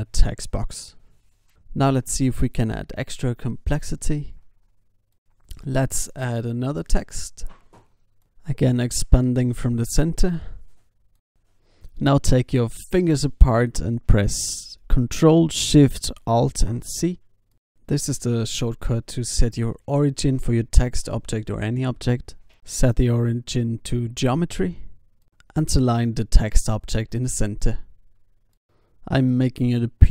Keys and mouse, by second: 4.2 ctrl+s, 5.1 alt+a, 5.1 shift+s, 5.6 shift+a, 10.2 Tab, 10.6 BackSpace, 11.0 BackSpace, 11.5 shift+h, 11.7 shift+i, 13.1 Tab, 15.5 alt+c, 18.4 ctrl+alt+shift+c, 20.6 alt+g, 22.2-23.8 drag, 26.0 i, 26.9-28.7 drag.